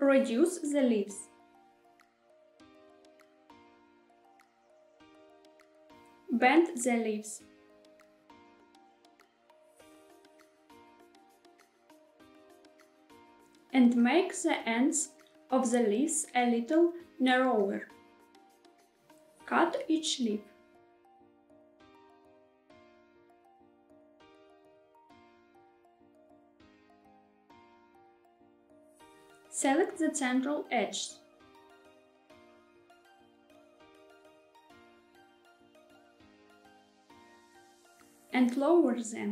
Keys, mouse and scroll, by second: 4.7 click, 5.4 middle click, 5.9 g, 6.8 z, 11.8 click, 12.1 middle click, 12.8 shift+middle click, 14.4 s, 17.8 click, 18.3 middle click, 19.6 ctrl+r, 22.0 shift+middle click, 22.4 ctrl+r, 23.3 click, 23.5 middle click, 23.7 shift+middle click, 24.0 middle click, 24.2 shift+middle click, 24.6 ctrl+r, 25.2 click, 25.5 middle click, 25.7 shift+middle click, 25.9 middle click, 26.1 shift+middle click, 26.6 ctrl+r, 27.3 click, 27.5 middle click, 27.8 shift+middle click, 29.0 click, 29.7 shift+click, 30.2 shift+click, 30.6 middle click, 31.0 shift+middle click, 31.5 middle click, 32.1 shift+click, 32.4 shift+click, 32.6 shift+click, 32.8 middle click, 33.0 shift+middle click, 33.3 middle click, 34.2 shift+click, 34.6 shift+click, 34.8 middle click, 35.0 shift+middle click, 35.2 middle click, 35.9 shift+click, 36.2 shift+click, 36.6-37.9 middle drag, 38.2 g, 39.1 z.